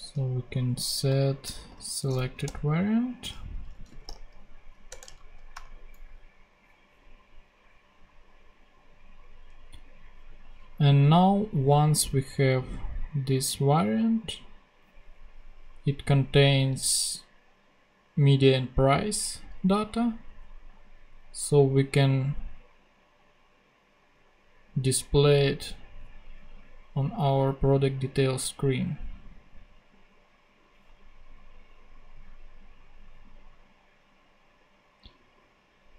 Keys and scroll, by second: 0.0-2.1 typing, 2.1 Down, 2.4 Return, 3.5-4.5 typing, 4.8 Return, 5.1 super+Right, 5.5 super+;, 6.4 ;.